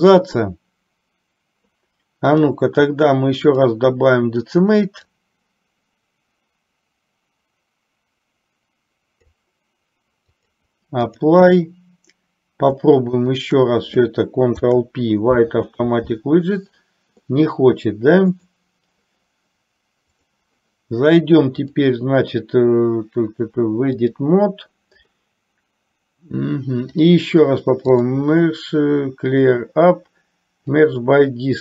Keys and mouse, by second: 2.5-3.9 drag, 5.5-9.5 drag, 10.5-11.7 drag, 13.3 shift+click, 14.7 ctrl+p, 18.4 click, 20.2 click, 21.7-24.5 drag, 28.0-31.3 drag.